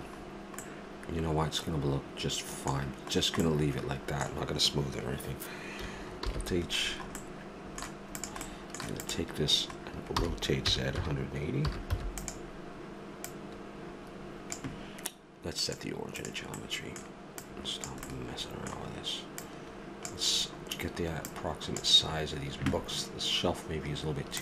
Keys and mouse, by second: 4.0-6.2 middle drag, 6.2 alt+h, 7.2 middle click, 8.1-9.5 right drag, 9.5-10.8 drag, 10.2 r, 13.3-15.2 drag, 15.6-16.7 drag, 20.0-21.8 drag.